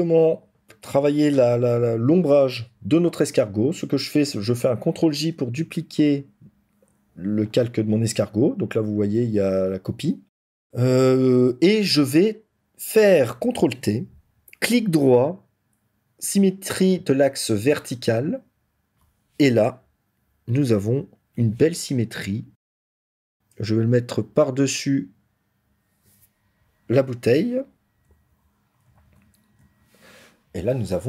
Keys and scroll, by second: 4.9 ctrl+j, 13.5 ctrl+t, 28.1 ctrl+-.